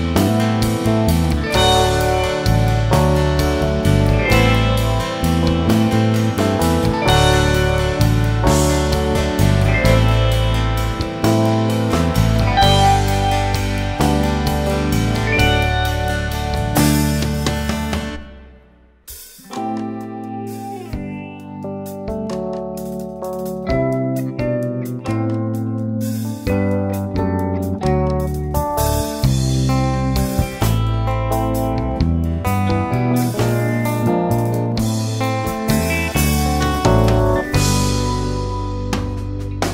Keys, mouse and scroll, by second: 3.9-4.3 scroll up 1, 4.3 shift+middle click, 5.1 s, 6.1 alt+a, 6.7 click, 10.6 alt+a, 11.4 click, 15.1 Delete, 17.3 alt+click, 18.5 e, 26.0 click, 27.9 click, 30.9 alt+a, 31.4 Tab, 31.6 scroll down 2, 31.8 alt+a, 31.9-35.3 middle drag, 35.8-36.5 scroll up 2, 36.5 click, 36.6 Tab, 37.1 click, 38.5 click, 38.7 alt+a.